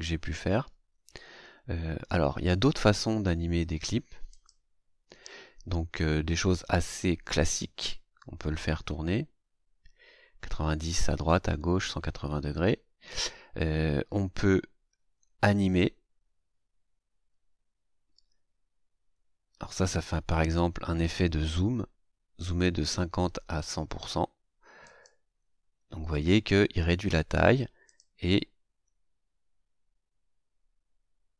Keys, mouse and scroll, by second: 4.2 click, 6.8 right click, 24.8 click, 27.8 click.